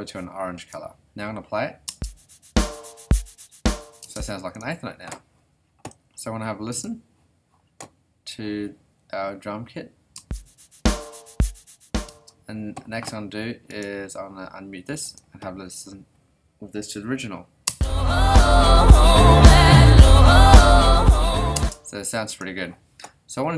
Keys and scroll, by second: 1.9 space, 4.0 space, 10.1 space, 12.1 space, 17.7 space, 21.5 space.